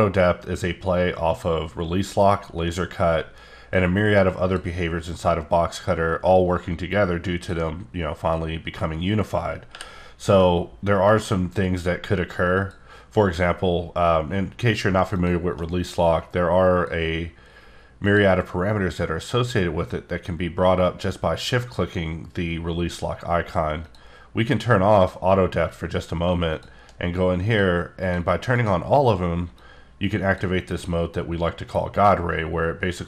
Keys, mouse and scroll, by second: 3.7 click, 5.4 click, 8.3 click, 9.7 t, 12.5 click, 15.1 shift+click, 18.0 click, 23.7 click, 23.8 click, 25.0 click, 26.5 shift+click, 28.5 click, 30.7 click.